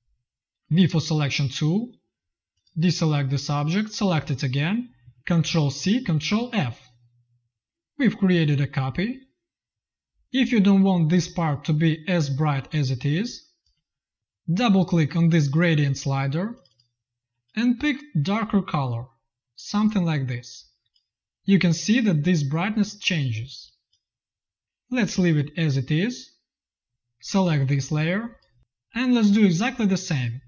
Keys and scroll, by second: 0.3 ctrl+z, 0.8 v, 5.3 ctrl+c, 5.9 ctrl+f, 11.5 z, 12.3 v, 12.9 z, 13.7 v, 27.8 space.